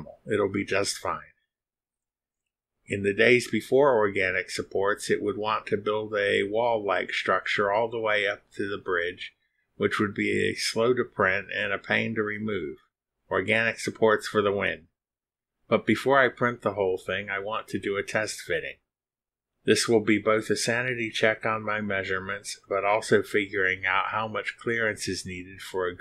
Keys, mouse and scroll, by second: 7.1 click, 9.9 click, 11.9 click, 13.9 click, 21.6 click, 22.8-23.1 scroll down 2, 23.4-23.7 scroll down 2, 25.0-25.4 scroll up 2, 25.6 scroll up 2.